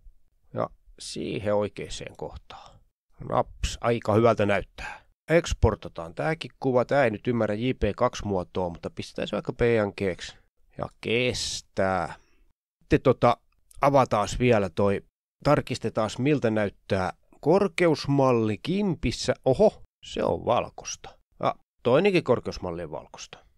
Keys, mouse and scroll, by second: 1.9 click, 2.4-2.7 ctrl+scroll up 4, 2.6 ctrl+click, 2.7 click, 3.3 ctrl+scroll up 1, 3.4 Up, 3.5 Left, 3.6 Left, 3.8 Up, 3.8 Down, 3.9 shift+scroll up 2, 4.2-4.6 shift+scroll down 3, 5.0 click, 6.2 click, 6.7 click, 6.9 Right, 7.0 Right, 7.3 shift+Left, 7.7 shift+Left, 8.0 shift+Left, 8.3 Delete, 9.1 Return, 10.1 click, 10.8 click, 11.0-12.0 typing, 12.0 click, 12.8 click, 15.8 click, 17.8 ctrl+scroll down 3, 18.0 ctrl+scroll up 2, 18.8 click, 19.2 click, 20.1-20.6 ctrl+scroll up 2, 20.6 ctrl+scroll down 2, 21.1 ctrl+scroll down 2, 22.8 click.